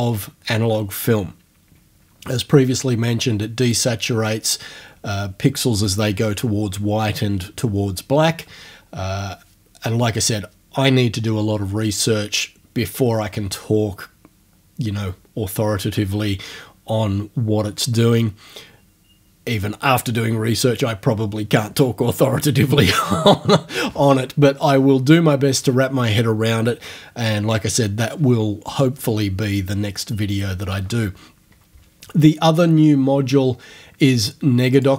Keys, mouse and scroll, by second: 34.8 click.